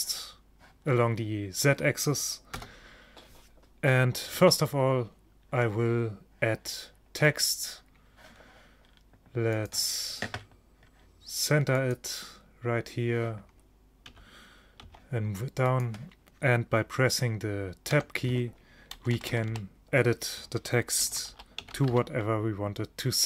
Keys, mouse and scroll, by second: 2.6 KP_0, 4.4 shift+a, 9.6-13.6 drag, 14.2 g, 18.0 Tab, 19.0 BackSpace, 19.2 BackSpace, 19.4 BackSpace, 19.6 BackSpace, 21.1-22.0 typing.